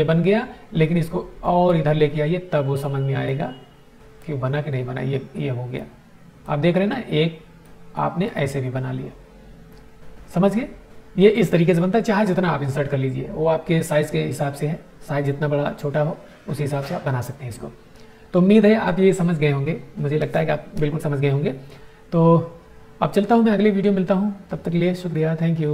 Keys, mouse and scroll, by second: 0.8-1.9 drag, 3.2-4.1 drag, 7.6-8.4 drag.